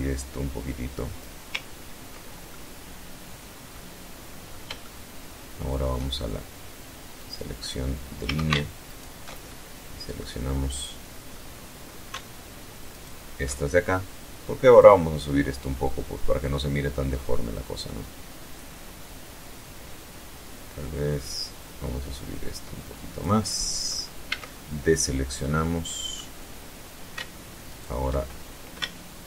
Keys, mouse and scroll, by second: 0.8-2.1 ctrl+middle drag, 3.1-4.4 shift+middle drag, 5.5 click, 6.6 a, 7.1 alt+shift+right click, 7.8-8.6 alt+shift+middle drag, 8.8-9.1 scroll down 2, 9.6 scroll up 2, 11.2 alt+shift+right click, 13.1-21.7 drag, 21.7 middle click, 22.6 a, 22.8 scroll up 1, 23.7 middle click, 24.7 scroll up 1, 26.0 alt+shift+right click, 27.9 alt+shift+right click, 29.0-29.2 alt+shift+middle drag.